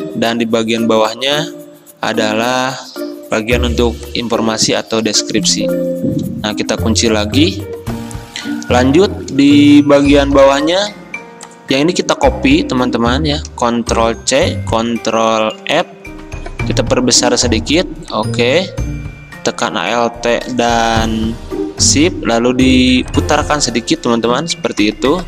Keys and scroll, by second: 7.1 ctrl+2, 14.4 ctrl+c, 15.7 ctrl+f.